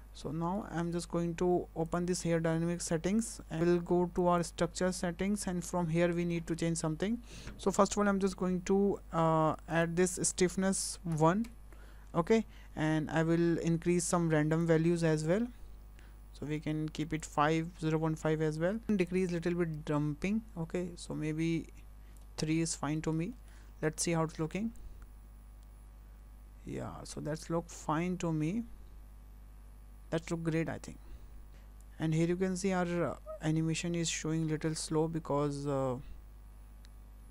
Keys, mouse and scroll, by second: 0.2 scroll up 4, 0.6 shift+middle click, 1.9 click, 4.2 click, 9.7 click, 14.6 click, 19.1 click, 22.5-23.0 scroll down 4, 23.0 middle click, 23.3 shift+middle click, 24.0 space, 31.5 click, 31.5 space, 32.1 space.